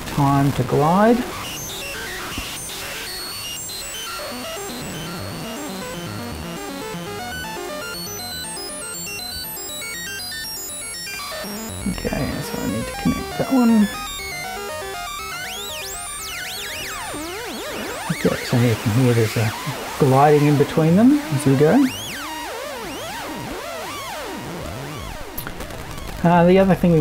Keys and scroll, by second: 15.4 BackSpace.